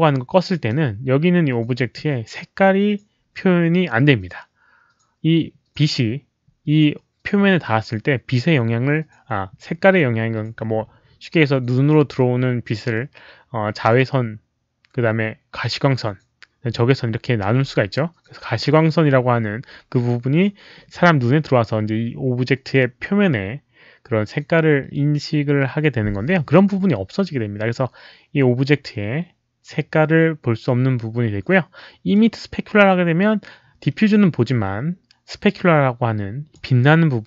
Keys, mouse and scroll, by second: 32.1-36.5 drag.